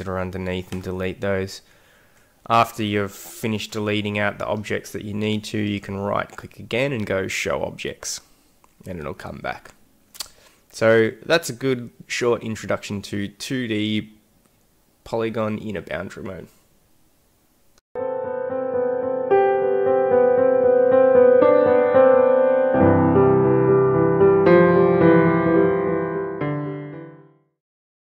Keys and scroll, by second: 3.2 ctrl+z.